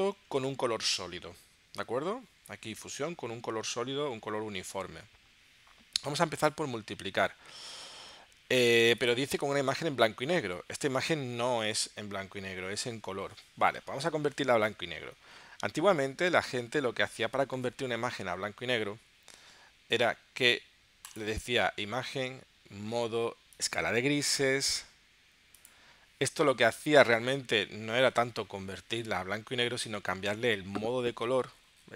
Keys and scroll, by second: 0.2 super+Tab, 10.3 super+Tab.